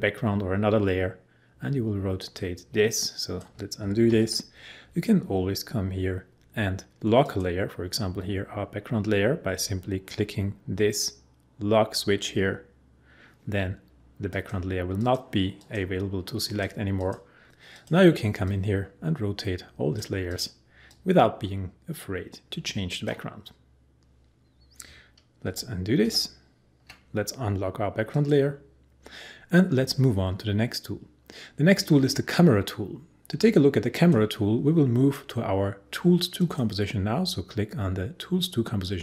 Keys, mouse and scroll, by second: 4.1 ctrl+z, 14.3-25.4 drag, 25.4 ctrl+z, 28.1 click, 33.9 click, 36.3 click.